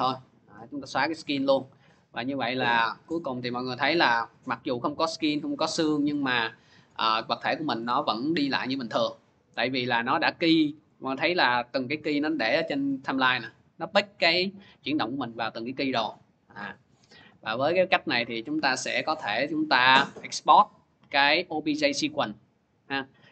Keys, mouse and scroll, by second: 0.6 click, 0.8 Delete, 3.7 click, 4.9 click, 5.8 click, 6.7 click, 7.1 click, 10.2 click, 12.2 click, 12.8 click, 13.2 click, 16.4 click, 18.1 click.